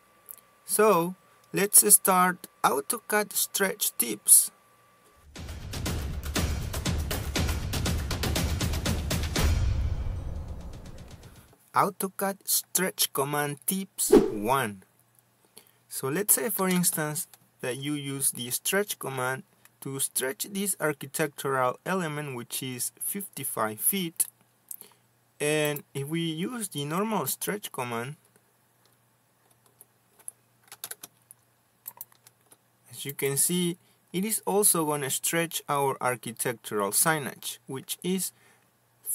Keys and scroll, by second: 29.0 Escape, 29.4 s, 29.5 space, 33.1 space.